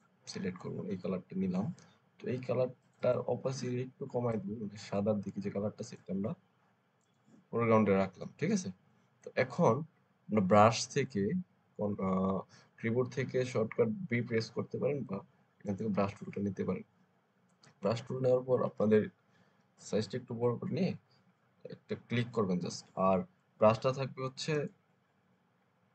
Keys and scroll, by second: 19.4 ].